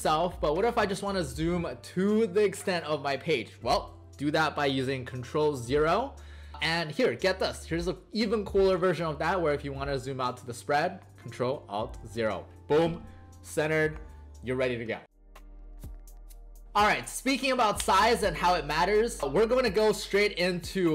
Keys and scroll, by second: 5.5 ctrl+0, 12.0 ctrl+alt+0.